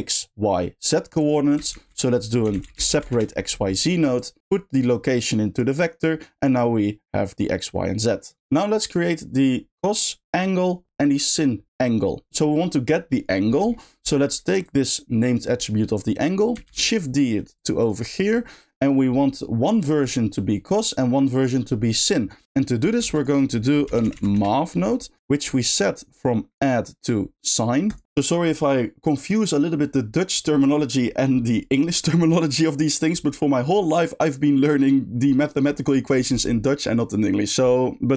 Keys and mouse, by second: 1.2 click, 4.7 click, 5.8 click, 8.1 click, 12.3 g, 13.7 middle click, 14.6 click, 14.8 click, 15.7 middle click, 17.5 shift+click, 17.8 shift+click, 18.5 shift+middle click, 25.5-28.0 shift+drag.